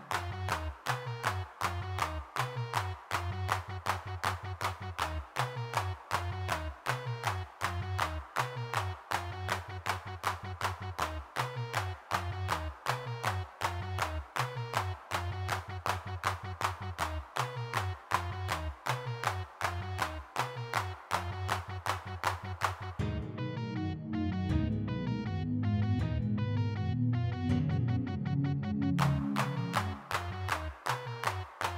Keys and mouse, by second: 0.5-4.6 drag, 4.6 middle click, 5.5-9.0 middle drag, 9.0 click, 10.3 f, 11.7-13.3 drag, 14.6-16.2 middle drag, 16.2 click, 17.1 f, 17.4 click, 18.5 middle click, 20.0-21.6 middle drag, 21.6 shift+c, 23.3 middle click, 24.0-24.6 ctrl+z, 26.3 3, 26.6 f, 27.0 click, 29.1 f, 29.5-30.5 drag, 31.3-31.7 drag.